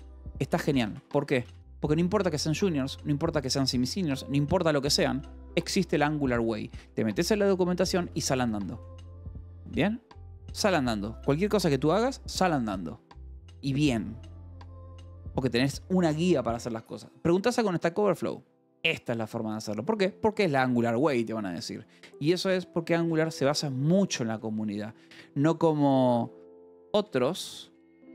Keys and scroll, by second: 0.0-0.7 typing, 7.2 Escape, 7.5-8.4 typing, 10.1 Escape, 22.6 j, 24.9 k, 26.3-27.5 typing.